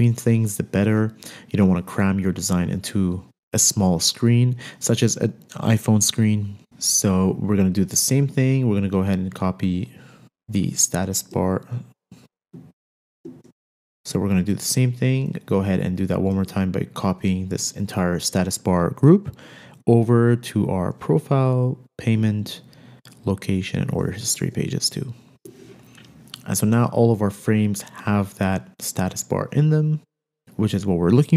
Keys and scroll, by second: 16.8 super+c, 24.9 super+v, 30.4 super+z.